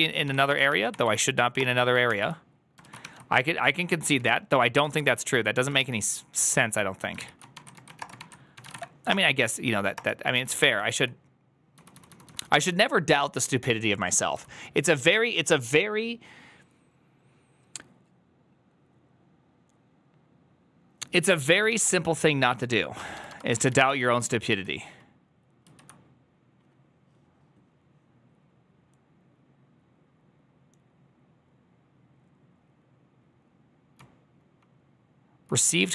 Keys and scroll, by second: 0.0-0.8 typing, 0.9 Up, 1.4 Return, 1.9 ctrl+h, 2.7 ctrl+a, 2.9-4.8 typing, 4.7 Up, 4.8 Up, 5.6 ctrl+c, 7.0 ctrl+h, 7.2-12.8 typing, 9.8 Return, 22.6-23.6 typing, 23.4 ctrl+a, 23.7 ctrl+u, 24.0 ctrl+u, 24.5 ctrl+u, 25.5 ctrl+u, 34.1 k, 34.6 k, 35.4 k.